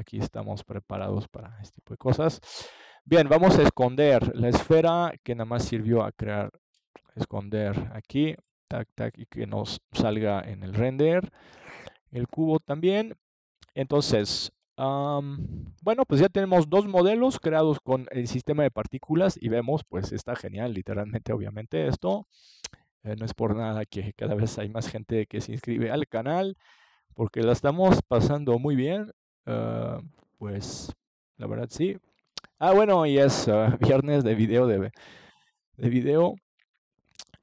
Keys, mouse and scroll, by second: 4.2-6.0 middle drag, 6.4 KP_7, 10.0 middle click, 12.7-16.0 middle drag, 16.0 ctrl+s, 19.8-21.6 middle drag, 22.6-25.2 middle drag, 28.8-30.0 middle drag, 30.4-32.3 middle drag, 33.8-37.2 middle drag.